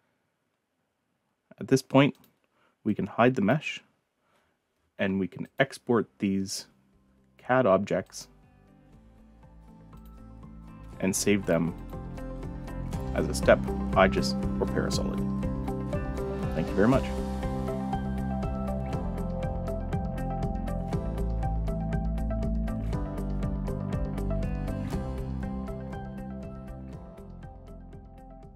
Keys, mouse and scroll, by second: 2.1 click, 2.9-3.5 drag, 5.4 click, 8.0 click, 9.9 click, 11.4 click, 11.7 click, 18.7-19.7 drag.